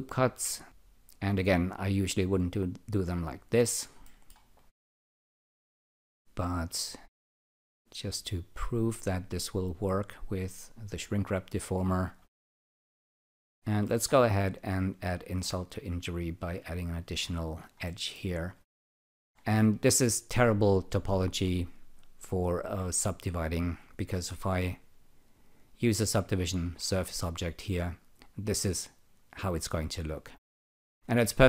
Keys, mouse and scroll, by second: 1.1 click, 3.3 click, 4.0 alt+middle click, 4.5 alt+click, 8.2 click, 9.2 click, 11.9 click, 12.5 alt+right click, 13.0 alt+click, 13.8 alt+middle click, 14.2 alt+click, 14.7 alt+right click, 16.7 click, 17.9 alt+middle click, 18.6 alt+middle click, 22.0-23.5 alt+drag, 24.8 alt+click, 26.8 ctrl+r.